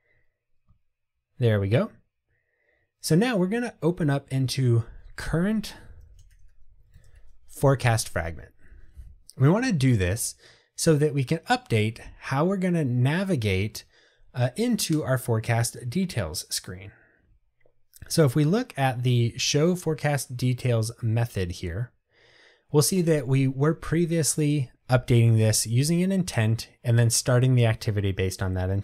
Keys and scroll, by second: 5.9 super+o.